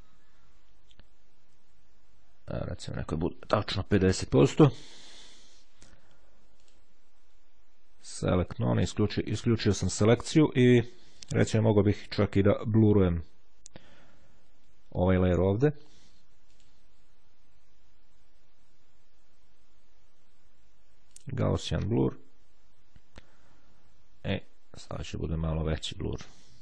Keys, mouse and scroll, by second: 2.6 click, 3.9 KP_5, 4.3 KP_0, 4.9 KP_Enter, 6.7 click, 8.5 click, 11.1 click, 16.7 click, 21.3 click, 24.5-25.5 drag.